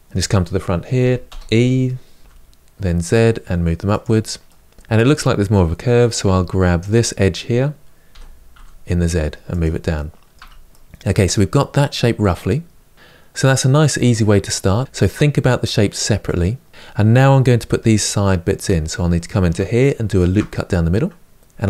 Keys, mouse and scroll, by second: 0.8 g, 1.2 e, 4.2-6.0 middle drag, 6.0 2, 6.6 click, 7.9 g, 9.7-10.1 middle drag, 10.1 Tab, 10.4-18.4 middle drag, 18.4 Tab, 19.9 ctrl+r, 21.3-21.6 scroll up 2.